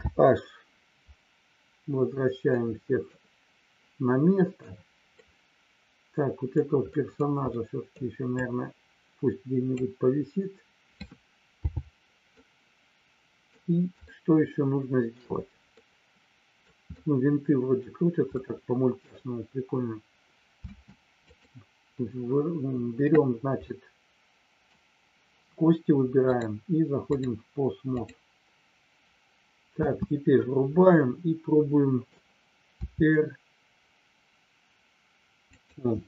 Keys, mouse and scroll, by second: 1.2 alt+h, 2.4 middle click, 4.2 middle click, 5.2-6.5 middle drag, 6.9 middle click, 7.4 middle click, 8.3-9.8 drag, 12.4-13.5 middle drag, 14.1-15.1 shift+middle drag, 15.8 middle click, 16.9 middle click, 18.3 middle click, 20.7 space, 21.2 click, 23.5-24.7 middle drag, 26.3-27.3 drag, 27.9 click, 29.8 space, 30.8-32.1 middle drag, 35.5 click.